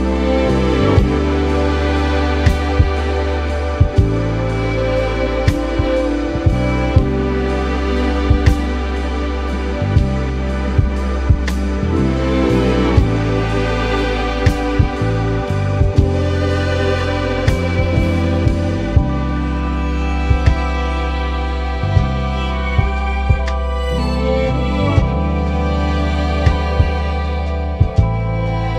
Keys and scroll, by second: 0.3 Down, 1.2 Up, 1.8 Up, 2.4 Up, 20.3 ], 26.7 super+s, 28.4 super+-, 28.6 super+0.